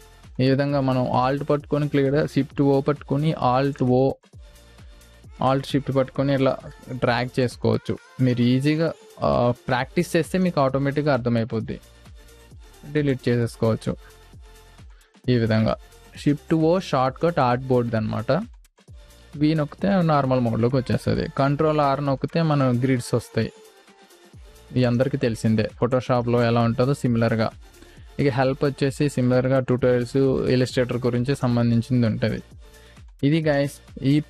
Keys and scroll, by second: 2.9 shift+o, 7.0 v, 8.7 space, 13.5 v, 15.1 Delete, 15.6 space, 18.7 shift+o, 19.3 v, 21.7 ctrl+r, 25.6 space, 31.4 space, 32.9 Delete.